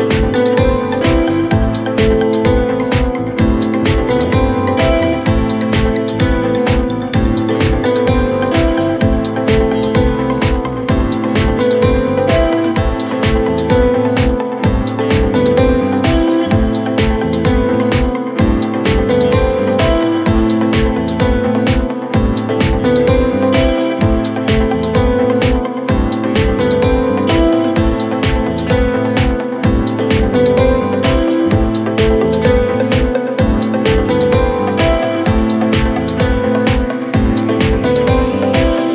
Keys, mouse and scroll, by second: 0.1 click, 1.8 click, 2.5 click, 4.7 click, 6.6 click, 7.6 click, 8.9 Delete, 10.5 click, 11.7 right click, 12.6 click, 13.1-15.0 typing, 15.2 Return, 17.2 click, 18.0 click, 18.9-20.2 typing, 20.8 click, 20.9 click, 22.7 click, 23.7 click, 24.3-25.2 typing, 27.4 click, 27.7-29.7 typing, 30.4 click, 30.6 click, 31.6 click, 31.9-32.8 typing, 32.8 Return, 34.7 right click, 36.9 click, 37.5-38.3 typing, 38.3 Return.